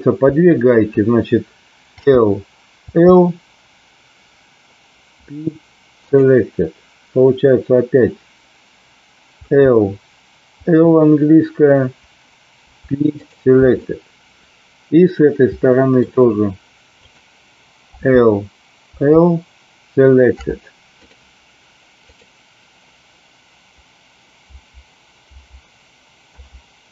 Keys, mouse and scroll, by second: 1.9 l, 2.8 l, 5.0 p, 9.3 l, 10.6 l, 12.5 p, 13.7-16.0 middle drag, 17.0 click, 17.9 l, 18.9 l, 20.4 p, 22.0 click, 24.4 l, 25.3 l, 26.3 p.